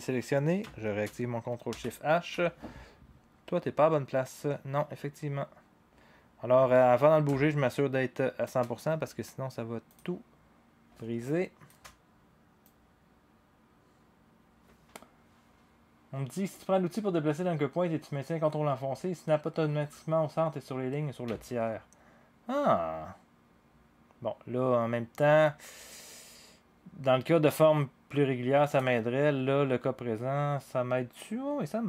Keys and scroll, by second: 1.7 ctrl+shift+h.